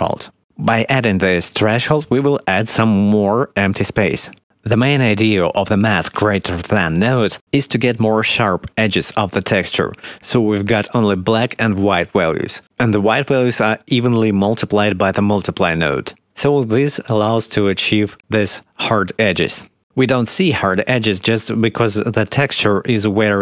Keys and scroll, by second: 9.1 1, 10.6 ., 10.8 9, 11.0 Return.